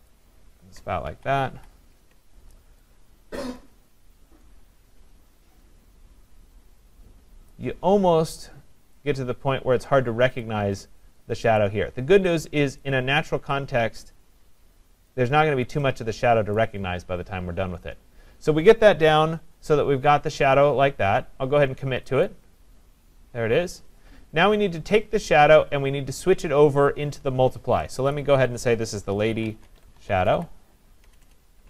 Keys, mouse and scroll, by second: 0.1 click, 1.1 ctrl+=, 1.5 ctrl+=, 3.3-4.8 scroll, 3.6 click, 4.8-5.8 scroll, 7.5 click, 9.0 click, 10.4 click, 11.6 click, 22.3 click, 28.0 click, 28.2 click, 29.1-31.6 typing.